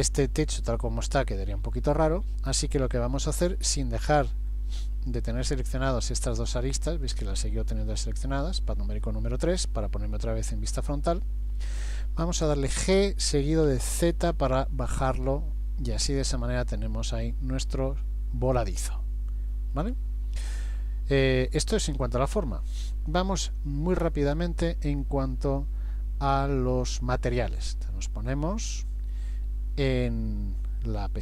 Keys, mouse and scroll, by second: 5.2 middle click, 8.3 KP_3, 12.7 g, 17.8 middle click, 29.2 click.